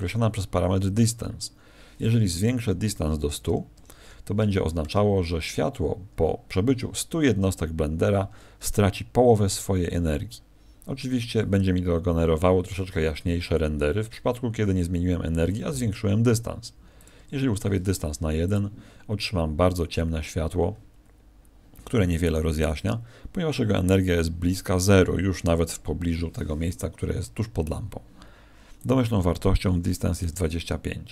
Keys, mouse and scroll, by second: 19.2 F11.